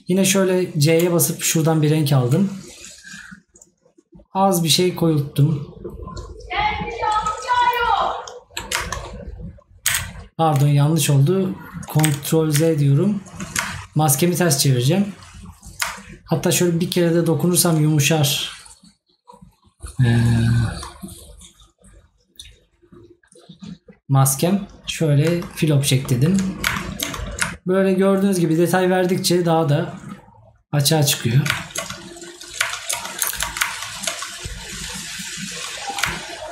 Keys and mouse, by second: 26.0 right click, 27.7 right click.